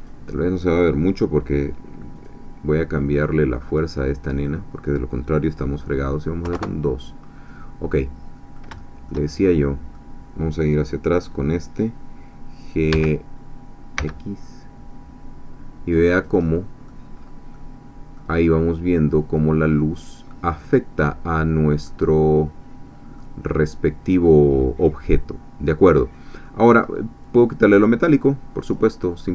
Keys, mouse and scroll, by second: 0.1 click, 2.3 click, 3.9 click, 6.4 2, 6.5 Return, 8.0 middle click, 8.6 scroll down 3, 8.8-10.1 shift+middle drag, 11.3 click, 12.9 g, 14.0 x, 16.2 click, 16.5 middle click, 17.1-17.5 scroll up 1, 17.5 middle click, 19.4 middle click, 21.9-23.3 middle drag, 26.5 middle click, 27.2-29.2 drag, 29.2-29.3 middle drag.